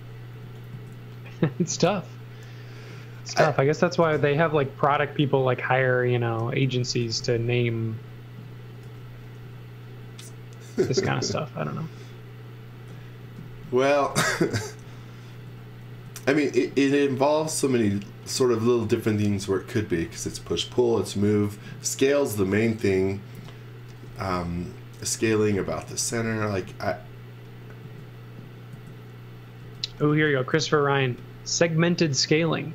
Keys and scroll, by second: 0.3 s, 4.0 m, 6.4-7.7 typing, 8.8 x, 9.4 b, 13.2-15.4 typing, 18.8 z, 23.9-26.9 typing, 29.6 space, 30.0 s.